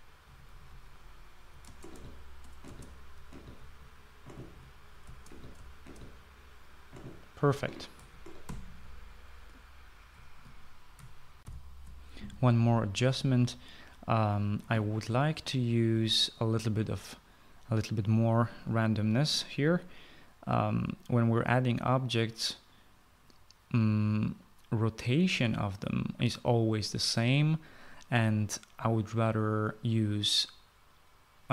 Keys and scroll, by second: 0.8-6.3 typing, 7.9-8.7 typing, 9.2 Escape, 12.2 shift+F9, 12.3 shift+F9.